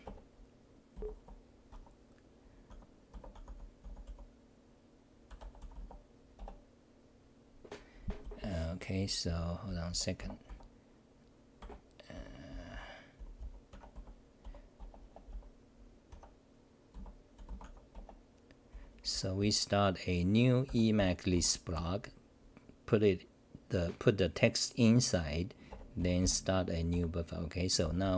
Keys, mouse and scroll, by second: 7.1 ctrl+g.